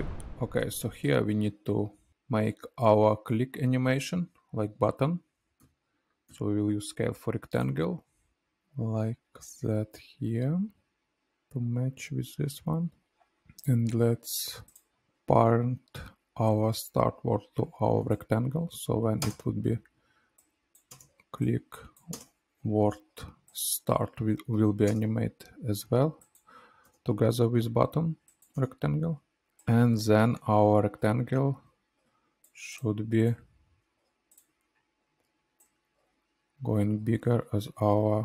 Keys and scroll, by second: 5.6 s, 6.2 s, 19.2 space, 24.8 space.